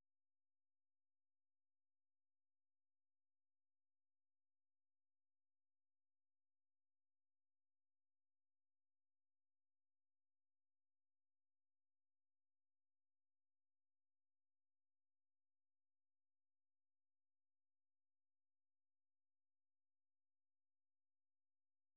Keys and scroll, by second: 2.3 ctrl+c, 2.9 super+1, 3.6-7.3 typing, 13.9 Up, 14.4-20.7 typing.